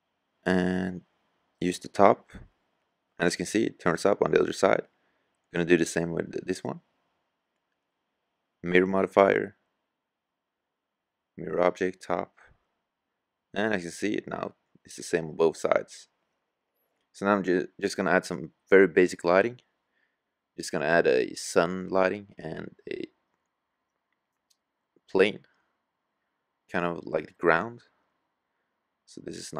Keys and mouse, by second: 3.4-4.7 right drag, 4.7-7.6 middle drag, 6.0-7.8 drag, 7.8-9.7 middle drag, 11.4-12.1 middle drag, 22.8-24.3 drag, 25.4 s.